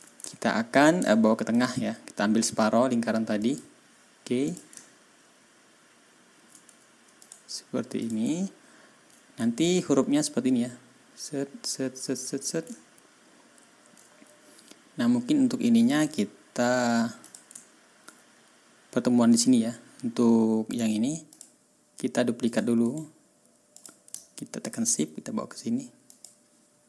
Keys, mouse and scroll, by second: 0.2 ctrl+scroll down 2, 1.5 shift+click, 3.3 click, 4.4 click, 4.7 ctrl+scroll down 2, 5.9-6.2 ctrl+scroll up 2, 7.1 click, 7.9 click, 8.3-8.6 ctrl+scroll down 2, 12.7 ctrl+scroll down 2, 13.0-13.7 ctrl+scroll up 4, 15.8 click, 17.2 click, 17.6 ctrl+scroll up 2, 21.2 click, 22.4 click, 22.8 right click, 23.7 click, 24.6 shift+click, 26.0 click.